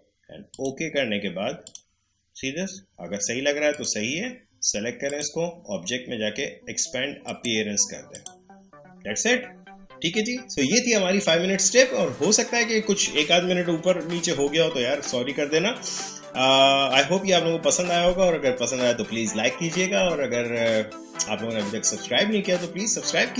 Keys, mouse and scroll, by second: 0.5 click.